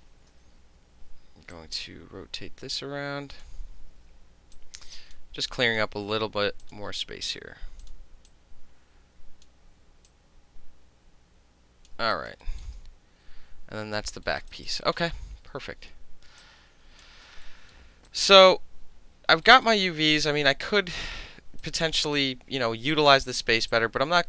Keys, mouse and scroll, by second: 1.5-3.4 alt+drag, 3.8 w, 4.6-5.2 drag, 5.6 click, 6.6 click, 7.8 click, 8.3-9.5 drag, 10.1-11.9 drag, 12.1 alt+right click, 12.4 alt+middle click, 14.3 alt+middle click, 14.5 alt+right click, 15.0-16.4 middle drag, 15.6 e, 16.4 click, 17.0 middle drag, 17.5 alt+middle click, 18.1 alt+right click, 19.5 alt+middle click, 21.6 alt+click, 23.7 click.